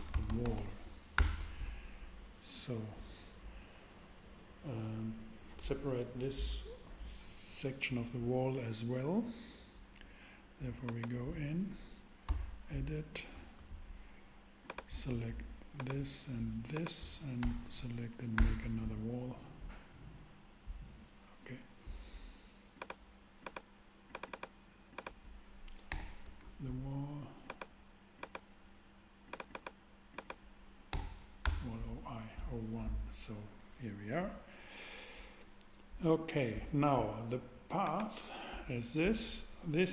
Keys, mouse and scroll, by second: 0.0-0.6 typing, 1.1 Return, 12.3 Tab, 17.4 p, 18.1 p, 18.3 Return, 25.9 h, 26.2 Return, 30.9 h, 31.4 Return.